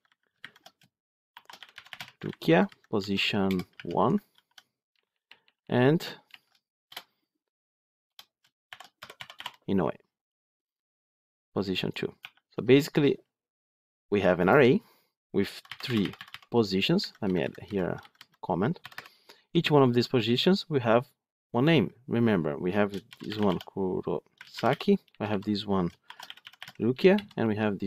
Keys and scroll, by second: 0.3 ctrl+shift+Left, 4.1 ctrl+d, 6.1 ctrl+shift+Right.